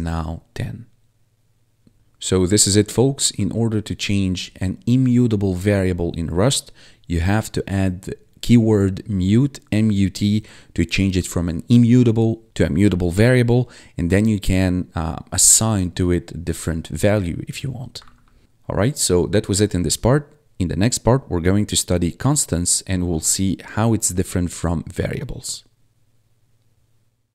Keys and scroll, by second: 3.2 1, 18.2 1.